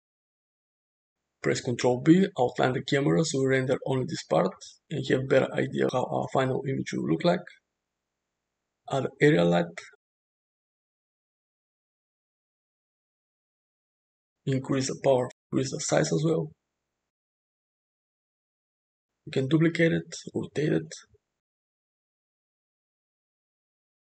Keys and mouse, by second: 2.1 ctrl+b, 5.9-6.5 middle drag, 6.8 shift+a, 10.2 g, 13.0 click, 14.2-15.8 drag, 15.1 0, 16.3-17.4 drag, 18.9 `, 19.7 shift+d, 20.4 r, 20.6 r, 22.5 `, 22.9 `.